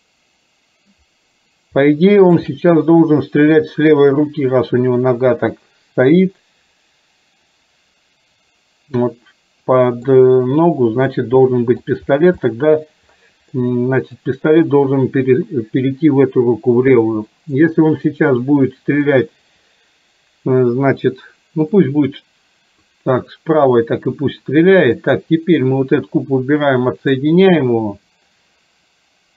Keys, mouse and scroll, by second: 1.9-2.5 shift+middle drag, 2.6-3.1 middle drag, 9.1-10.1 middle drag, 11.2 middle click, 12.5-12.9 middle drag, 13.6-14.4 middle drag, 18.2-19.1 middle drag, 21.9-23.0 middle drag, 25.0 click, 27.1 click.